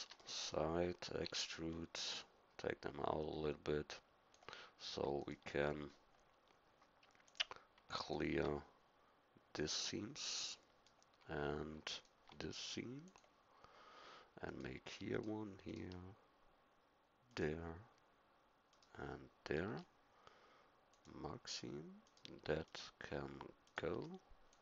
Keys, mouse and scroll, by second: 0.2-2.2 middle drag, 1.2 e, 5.2-7.0 right drag, 7.3 right click, 10.5-11.9 middle drag, 13.0-17.3 middle drag, 20.9-22.6 drag, 24.0 click.